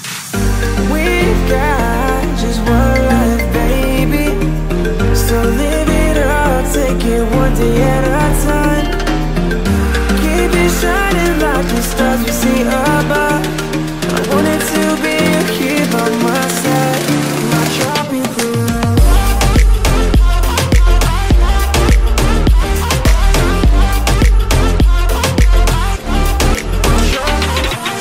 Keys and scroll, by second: 2.7 Return, 3.7 space, 13.7 ctrl+j, 15.5 3, 16.2 6, 16.9 ctrl+a, 17.7 ctrl+t, 26.7 space, 27.5 ctrl+j.